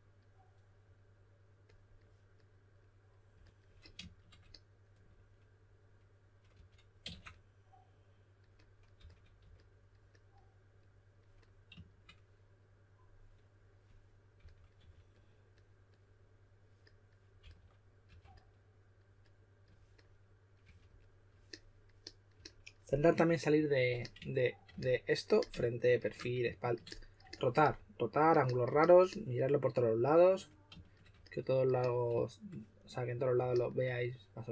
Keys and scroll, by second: 6.5 2, 8.7-9.9 typing, 14.1-15.3 typing, 17.4-18.0 typing, 20.6 2.